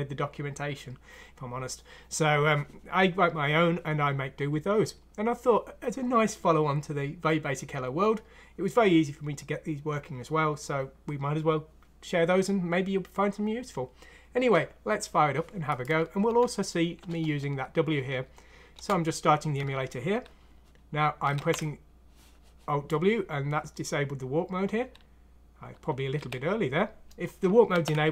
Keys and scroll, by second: 16.3 F6, 18.7 Return, 21.3 alt+w, 26.1 w, 27.7 alt+w.